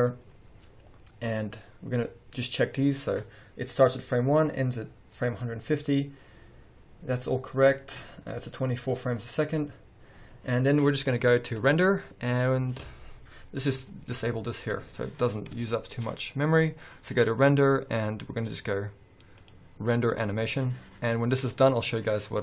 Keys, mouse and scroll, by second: 0.0-0.5 scroll down 1, 1.3-1.7 scroll up 1, 6.0-6.8 scroll up 1, 8.8-9.3 scroll down 1, 10.2-10.6 scroll up 1, 13.3 scroll down 1, 13.5-13.8 scroll up 1, 13.8 z, 15.4 scroll up 1, 15.7-17.2 shift+middle drag, 17.2-22.4 drag.